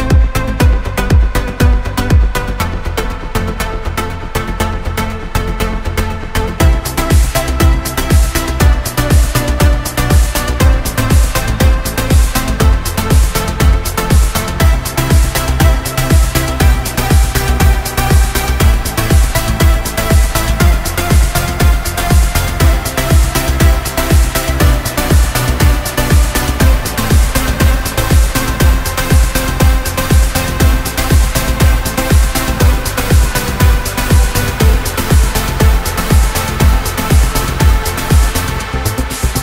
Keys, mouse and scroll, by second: 0.0-1.2 drag, 1.2 Tab, 1.5 g, 2.2 Tab, 3.1-6.0 drag, 6.0 Tab, 6.4 right click, 7.3 z, 8.8 z, 9.7 Tab, 10.4-13.2 drag, 13.2 Tab, 13.7 scroll up 2, 14.4-14.9 scroll up 1, 14.9-16.4 shift+middle drag, 20.2 click, 20.6-21.0 scroll down 1, 21.0 KP_0, 22.4-24.8 right drag, 25.1-30.3 drag, 33.0 BackSpace, 33.6 right click, 34.0-37.2 right drag, 37.4 right click, 38.2 click, 38.8 scroll up 8, 38.9 middle click.